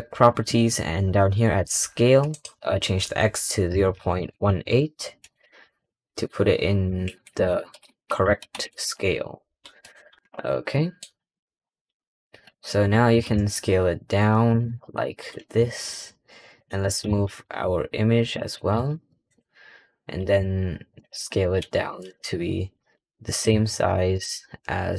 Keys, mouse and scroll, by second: 2.2-5.2 drag, 5.5-7.3 drag, 7.3 BackSpace, 7.4 BackSpace, 10.2-10.6 scroll down 3, 10.6-11.0 middle drag, 11.0-12.4 scroll up 3, 12.4 click, 12.8 scroll down 3, 13.0 s, 14.6-15.0 scroll up 2, 15.0 s, 16.7 click, 16.9 g, 17.3 g, 18.6 g, 19.5-20.0 scroll down 3, 20.0 s, 21.1-21.5 scroll up 3, 21.5 g, 22.2 scroll up 4, 22.7 s, 23.4 g.